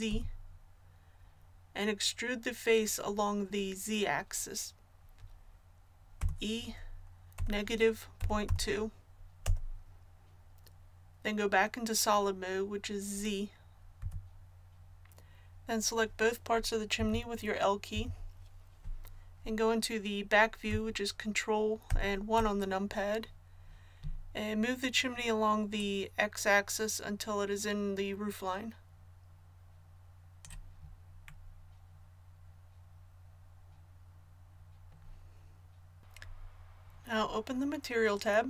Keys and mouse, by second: 0.1 z, 6.2 e, 14.0 z, 25.8-30.4 drag, 31.9 middle click, 33.2-38.4 middle drag.